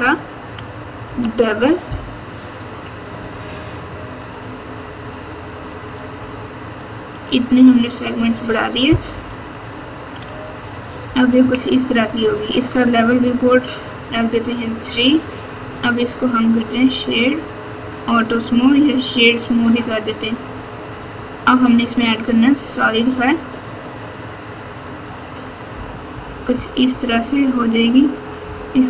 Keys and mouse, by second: 1.0 ctrl+b, 9.1 KP_8, 10.2 alt+z, 11.4 KP_6, 13.6 click, 14.8 Tab, 15.5-17.3 drag, 18.5-19.2 drag, 21.5-21.8 drag, 23.2-24.7 drag, 26.1-27.6 typing, 28.7 right click.